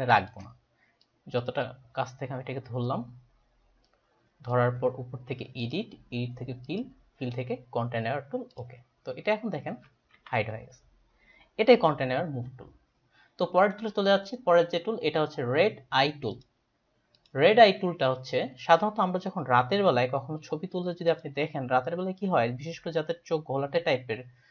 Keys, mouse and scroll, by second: 1.1 click, 5.6 click, 6.7 click, 10.3 ctrl+d, 13.6 right click, 14.3 right click, 16.4 click, 17.1 click, 18.7 click, 21.1 click.